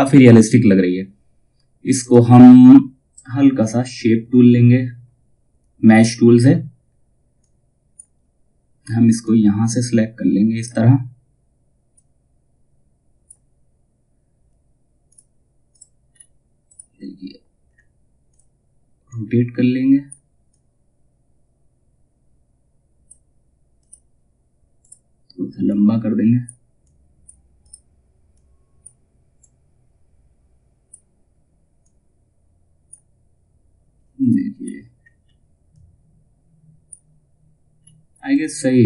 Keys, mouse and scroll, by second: 1.5 click, 5.5-14.6 drag, 15.6-16.2 scroll up 1, 16.2 click, 17.2-17.8 scroll down 1, 17.8 click, 17.9-34.1 drag, 34.1 scroll up 1, 35.2-37.3 drag, 37.3-37.8 scroll up 1, 37.8-38.8 drag.